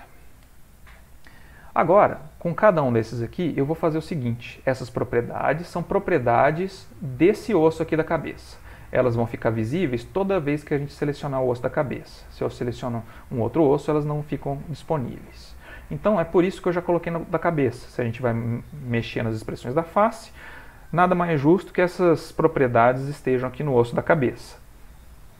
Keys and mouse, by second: 6.4 click, 7.5 g, 10.9 click, 12.5 click, 14.1 middle click, 16.2 click.